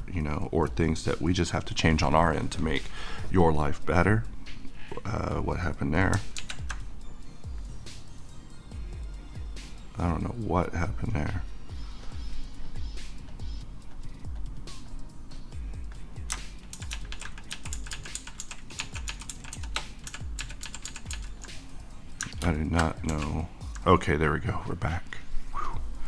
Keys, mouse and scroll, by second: 2.8 right click, 2.9 click, 6.3 ctrl+z, 7.2 middle click, 7.4-10.7 drag, 10.7 middle click, 12.7 click, 16.7 ctrl+shift+z, 20.1 ctrl+z, 23.1 z, 24.2-25.7 middle drag, 25.7-26.0 drag.